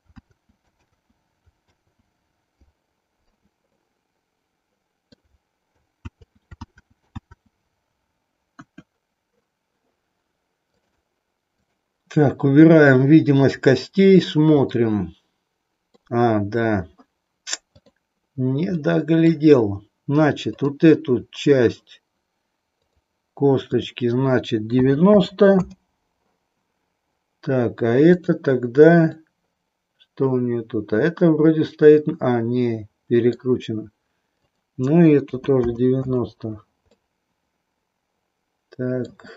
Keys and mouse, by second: 3.7-5.3 middle drag, 6.0 ctrl+z, 8.5 KP_1, 11.7 click, 13.4 click, 14.7-15.9 middle drag, 18.7 middle click, 20.4 click, 22.7 click, 23.7-26.2 drag, 28.0 click, 29.0-33.4 middle drag, 34.4-36.4 drag, 36.9-39.2 middle drag.